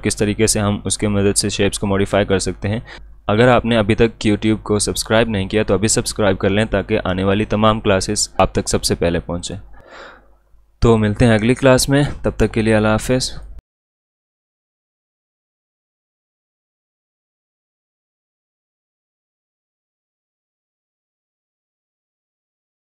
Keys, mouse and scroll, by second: 9.4 click, 13.4 click.